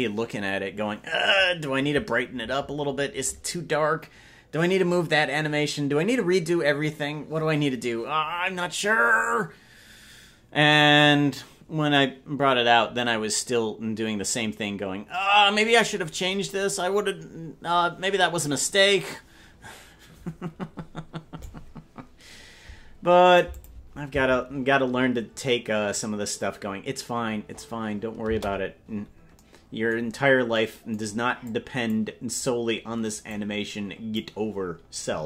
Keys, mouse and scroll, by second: 23.6 click, 28.5 space, 31.5 click, 33.4 click.